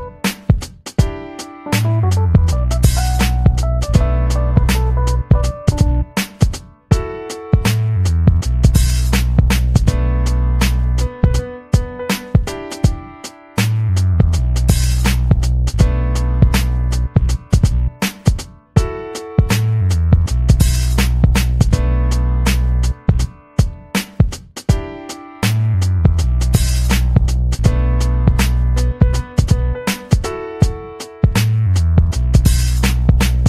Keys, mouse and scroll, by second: 0.8 click, 1.8 ctrl+click, 3.2 click, 4.2 click, 4.7 click, 5.4-6.6 drag, 8.8 ctrl+scroll up 2, 9.2 click, 11.2 ctrl+scroll down 1, 11.8 ctrl+scroll down 1, 13.2 click, 15.6 click, 18.0 click, 18.8 click, 19.1 click, 20.6 click, 21.2 click, 21.8 ctrl+scroll up 2, 23.2 click, 24.6 click, 25.6 click, 26.3 click, 26.8-28.1 ctrl+drag, 28.7-33.3 ctrl+drag.